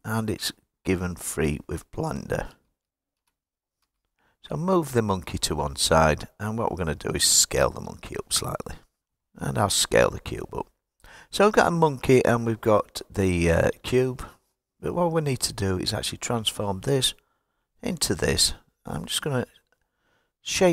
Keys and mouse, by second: 0.8 click, 2.7 ctrl+z, 3.8 x, 5.3 click, 7.7 s, 9.0 click, 9.8 s, 10.9 click, 18.3 click.